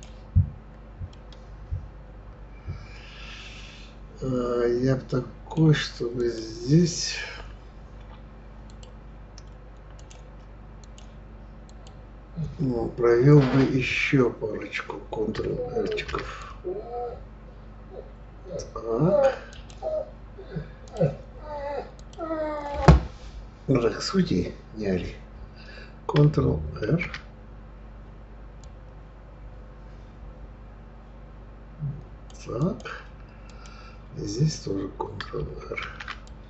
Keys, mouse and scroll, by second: 1.1-4.1 middle drag, 6.2 click, 8.7-10.1 drag, 10.8-13.8 drag, 15.9 ctrl+r, 20.8 click, 22.0 click, 26.8 ctrl+r, 32.6 click, 33.5 click, 35.8 ctrl+r.